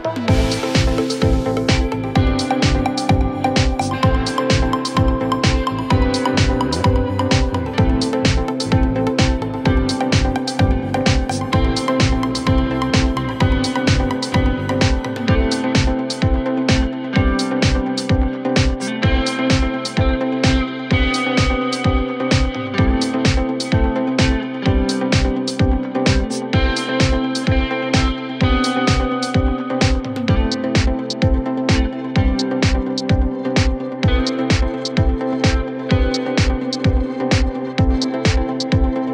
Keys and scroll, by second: 0.8 ctrl+z, 5.4 Delete, 8.2 shift+F2, 8.6 Escape, 15.8 KP_Add, 26.8 KP_Add, 35.4 w.